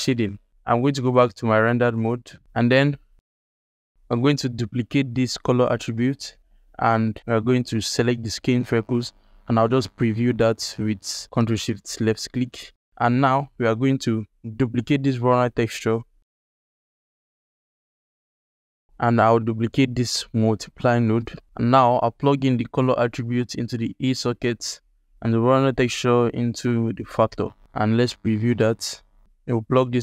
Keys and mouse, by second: 0.3 ctrl+alt+click, 0.5 z, 1.9 alt+click, 3.3 click, 3.9 shift+d, 5.6 alt+shift+click, 5.9 ctrl+alt+click, 6.4-7.8 drag, 9.0 ctrl+shift+click, 9.7 alt+click, 10.2 alt+shift+middle drag, 10.6 ctrl+alt+middle click, 11.2 click, 11.9 alt+shift+middle click, 12.5 ctrl+alt+middle click, 12.7 alt+shift+middle click, 13.9-14.8 drag, 15.7 shift+d, 16.8 alt+shift+click, 17.0 click, 17.1 alt+shift+click, 17.3 click, 17.6 g, 18.3 alt+shift+click, 18.4 ctrl+alt+click, 19.0 click, 19.3 shift+d, 21.0 ctrl+alt+click, 21.4 alt+shift+click, 22.7 click, 23.0-24.0 drag, 25.4-27.2 drag, 28.2 alt+shift+click, 28.6 ctrl+alt+click, 29.3-30.0 drag.